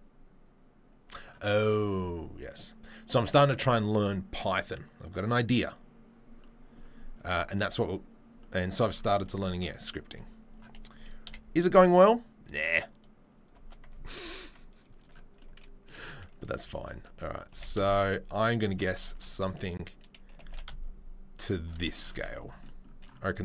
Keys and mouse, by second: 7.8-9.3 middle drag, 9.3 right click, 9.3-23.4 middle drag, 11.2 KP_7, 11.8 g, 14.0 ctrl+a, 16.6 s, 17.5 g, 19.1 z, 20.3 g, 22.1 z.